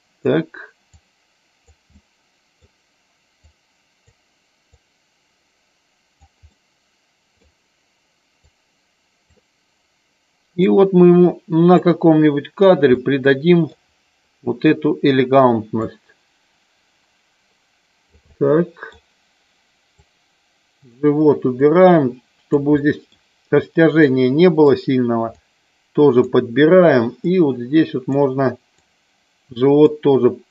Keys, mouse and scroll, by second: 0.9 click, 1.8 middle click, 3.4 click, 4.8-6.2 drag, 6.4 middle click, 8.4 click, 10.7-11.8 drag, 12.9 middle click, 15.7-18.2 drag, 18.3 middle click, 19.9 click, 21.6 click, 22.8 middle click, 23.9 middle click, 25.3 click, 27.3 click, 28.8 click.